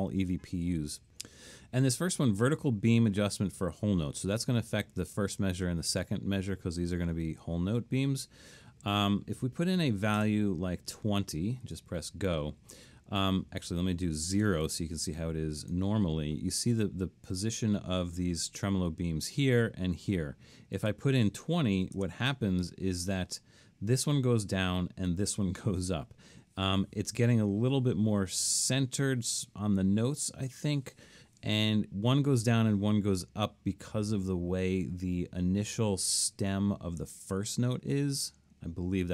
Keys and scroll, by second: 9.8-10.2 typing, 14.7 0, 21.6-22.5 typing.